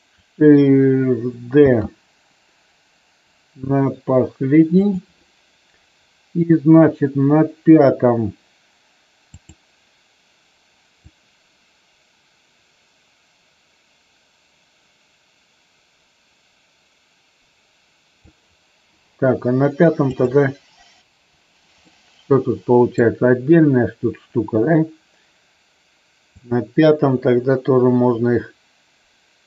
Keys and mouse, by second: 1.6 shift+d, 4.7 click, 9.4 click, 11.0-18.3 drag, 20.1 click, 21.9-22.9 middle drag, 26.4-29.4 drag.